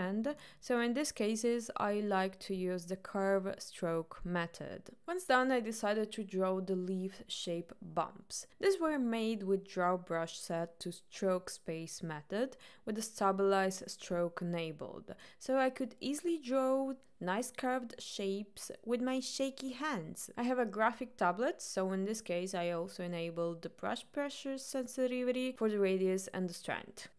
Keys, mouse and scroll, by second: 0.5 ctrl+right click, 1.0 ctrl+click, 4.0-5.9 middle drag, 5.1 click, 6.3-6.8 middle drag, 8.0 click, 9.1-10.5 middle drag, 13.7 click, 14.8 click, 16.4 middle click, 18.7-22.7 drag.